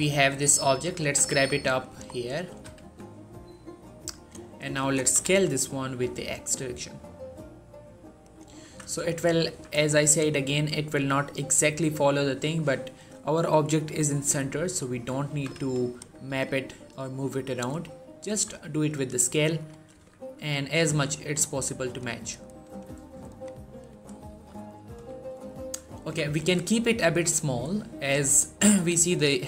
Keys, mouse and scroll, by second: 0.2 right click, 0.5 shift+middle click, 0.8 shift+g, 1.1 z, 1.7 click, 1.9 shift+middle click, 2.2 scroll up 1, 2.3 g, 2.6 z, 4.0 click, 4.8 s, 5.1 x, 8.1 click, 8.4 z, 8.9 shift+middle click, 9.4 z, 9.7 shift+middle click, 10.0 scroll up 1, 12.3-14.2 scroll down 1, 14.4 shift+middle click, 15.2 s, 15.4 x, 15.8 right click, 16.1 g, 17.4 right click, 17.7-18.1 scroll up 1, 18.1 s, 19.4 click, 19.8 z, 20.4 shift+middle click, 20.7 shift+z, 21.2 right click, 21.7 click, 22.2-22.9 scroll down 1, 23.3-24.0 scroll up 1, 24.1 shift+middle click, 24.8 s, 25.3 right click, 25.7 scroll down 1, 25.9 z, 26.3 z, 26.9 s, 28.5 click.